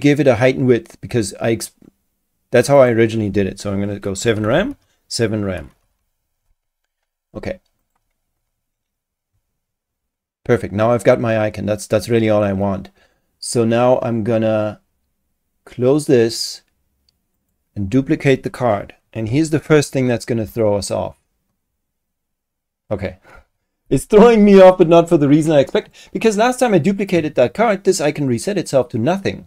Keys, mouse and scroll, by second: 2.8 click, 3.9-6.4 typing, 7.8 click, 16.0 click, 17.4 click, 20.5 ctrl+shift+d, 25.8 click.